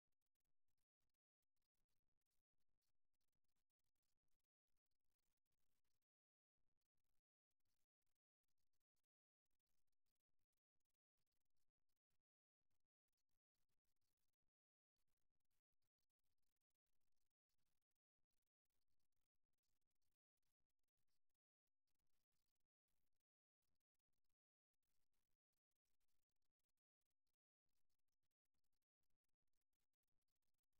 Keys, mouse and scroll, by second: 1.3-6.5 middle drag, 6.5 KP_1, 8.1-9.6 middle drag, 10.2-18.5 middle drag, 21.9-29.1 middle drag, 29.7-30.7 right drag.